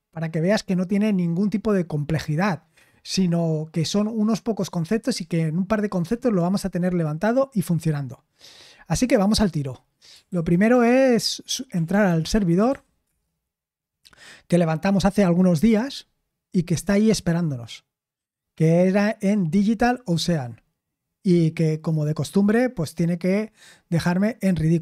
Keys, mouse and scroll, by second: 10.2 super+h, 10.7 super+l, 11.4-13.0 typing, 13.0 Return, 15.1-15.6 typing.